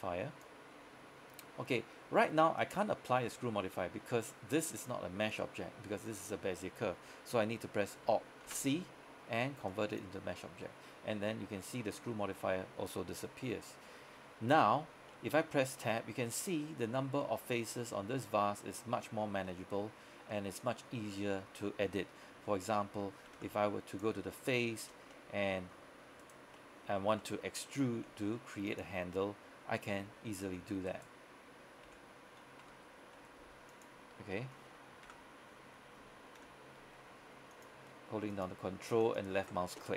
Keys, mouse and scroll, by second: 8.5 alt+c, 9.8 click, 13.6-14.7 scroll up 1, 14.7 Tab, 15.2-17.0 middle drag, 17.0 scroll up 1, 17.3 middle click, 17.8 scroll down 1, 17.9 middle click, 19.1-19.5 scroll up 1, 19.5 middle click, 20.3 scroll up 1, 20.4 middle click, 20.9 scroll down 1, 21.1 middle click, 22.5 Tab, 23.5 ctrl+Tab, 24.0 click, 24.5 right click, 25.2 middle click, 26.3 shift+right click, 26.6 middle click, 28.0 e, 28.8 click, 30.1 r, 30.6 e, 30.9 right click, 31.9 r, 33.1 y, 33.8 click, 34.4 middle click, 35.2 KP_1, 36.5 KP_5, 37.6 ctrl+click, 38.4 ctrl+click, 39.1 ctrl+click.